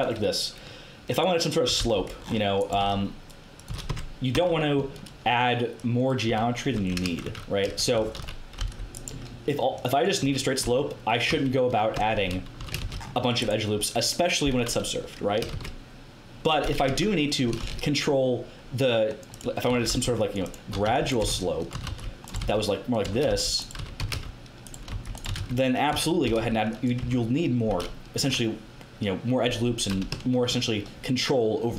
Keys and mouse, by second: 1.6 z, 1.7 c, 2.6 g, 3.6 z, 3.8 Tab, 4.3 Tab, 6.2 Tab, 6.7 Tab, 7.0 KP_Enter, 7.2-8.5 typing, 9.7-11.1 drag, 10.2 a, 10.6 Tab, 11.2 z, 11.9 Tab, 12.2 a, 12.5 a, 12.7 ctrl+r, 15.5 ctrl+z, 16.8 KP_1, 17.6 ctrl+r, 19.7-26.2 typing, 20.5 click, 27.0 Tab.